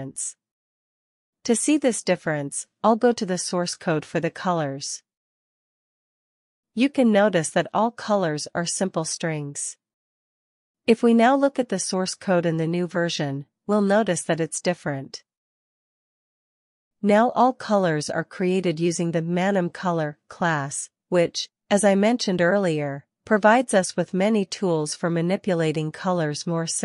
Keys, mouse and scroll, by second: 0.0-5.9 typing, 7.8 typing, 9.5 Escape, 9.9-11.1 typing, 12.5 ctrl+b, 12.8-14.7 typing, 16.3-17.2 typing, 19.4 typing, 20.7 typing, 21.7-22.5 typing, 24.3-25.6 typing, 26.7-26.8 typing.